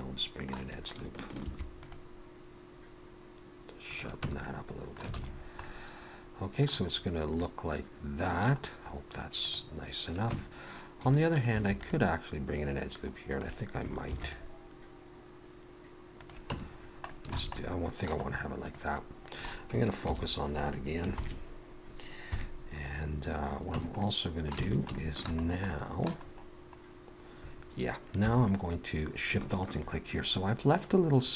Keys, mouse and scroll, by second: 1.5 ctrl+r, 4.3 Tab, 4.4 middle click, 5.2 alt+a, 5.3-6.4 scroll down 2, 5.6 middle click, 6.9-7.4 scroll down 2, 7.4 middle click, 8.6-9.2 scroll up 1, 9.2 scroll up 1, 9.4 click, 10.3 Tab, 11.5 ctrl+r, 14.1 ctrl+r, 16.5 Tab, 16.8-17.3 scroll down 2, 17.1 middle click, 17.4 alt+a, 17.6 middle click, 18.3-18.9 scroll up 2, 18.6 click, 18.9 middle click, 20.0 shift+h, 21.2 ctrl+KP_3, 22.3 KP_3, 23.2-23.8 scroll up 1, 23.8 Tab, 23.8 scroll up 1, 24.0 middle click, 24.7 alt+a, 24.9 shift+middle click, 25.4-26.5 scroll up 5, 25.7 middle click, 28.2 3, 29.5 alt+shift+click.